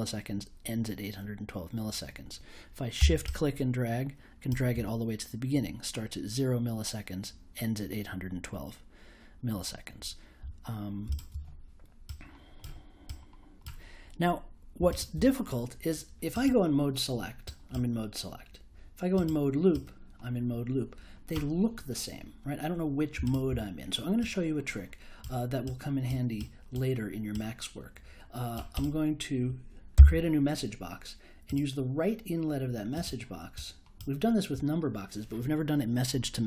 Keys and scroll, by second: 29.9 m.